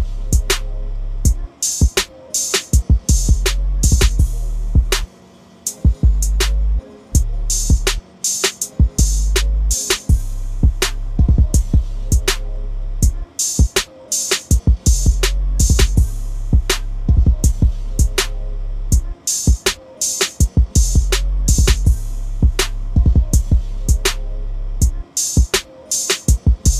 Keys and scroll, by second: 3.5 ctrl+d, 19.7 Delete.